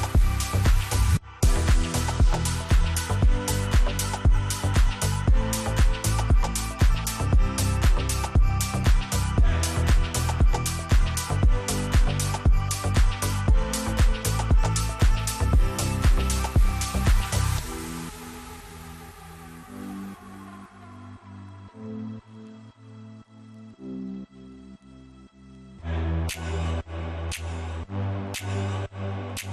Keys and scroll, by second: 1.9 5, 2.1 Return, 5.9 5, 6.1 Return, 11.1 5, 11.7 Return, 21.3 space, 21.9 shift+\, 22.3 c, 22.4 e, 22.9 Escape.